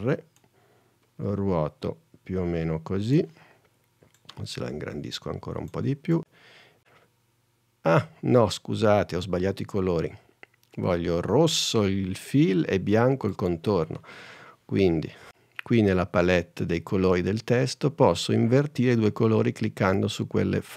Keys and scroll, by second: 6.6 super+Tab.